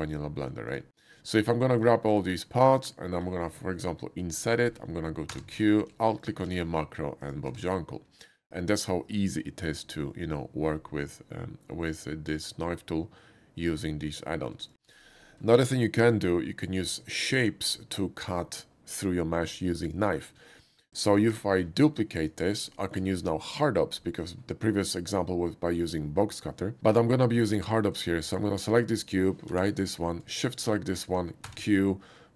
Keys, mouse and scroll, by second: 0.1 click, 1.4 shift+middle click, 2.1 shift+click, 2.5 shift+middle click, 7.2 click, 7.5 Tab, 11.7-14.2 middle drag, 14.7 click, 14.9 x, 15.6 shift+a, 17.4 click, 17.8 middle click, 20.6 middle click, 21.3 shift+d, 22.2 click, 22.8 shift+middle click, 28.1 shift+middle click, 28.7 shift+click, 29.5 g, 30.0 right click, 30.5 shift+click, 31.4 q.